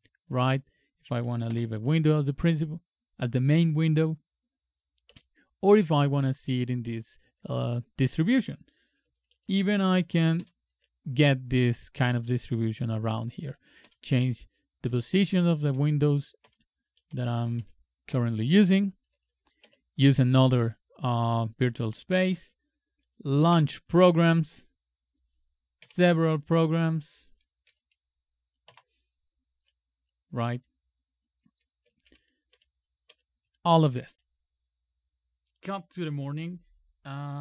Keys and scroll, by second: 0.3 super+Left, 1.5 super+m, 5.1 super+t, 9.4 super+e, 10.4 Up, 13.8 shift+super+Up, 14.9 shift+super+Up, 15.7 shift+super+Up, 16.4 shift+super+Up, 17.1 shift+super+Down, 17.6 shift+super+Down, 19.6 super+2, 23.5 super+], 25.8 super+/, 27.7 super+], 28.7 super+\, 32.1 super+c, 32.5 super+c, 33.1 super+c.